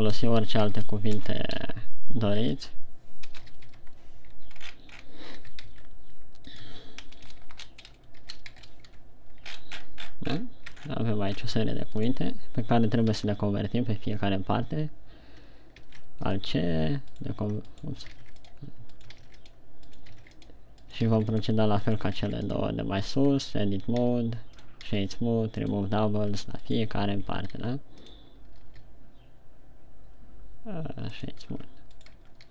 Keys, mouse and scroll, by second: 0.0-1.7 typing, 2.9 shift+d, 3.9 BackSpace, 3.9 d, 4.2 Tab, 5.0-5.6 shift+scroll down 12, 5.8 shift+d, 7.0 Tab, 7.0 click, 7.6 BackSpace, 7.9 BackSpace, 8.5 3, 8.9 shift+d, 9.2 Tab, 9.9-10.9 shift+scroll up 17, 11.2 scroll down 6, 12.3 right click, 13.5 alt+c, 16.1 alt+c, 17.5 right click, 18.0 right click, 18.5 alt+c, 19.3 right click, 19.8 alt+c, 20.2 right click, 20.3 alt+right click, 20.5 alt+c, 21.2 right click, 21.3 alt+right click, 21.5 alt+c, 22.3 right click, 22.5 alt+c, 23.5 right click, 23.9 Tab, 24.3 w, 25.4 w, 26.7 Tab, 27.0 right click, 27.7 Tab, 27.9 w, 29.3 w, 32.1 Tab, 32.4 right click.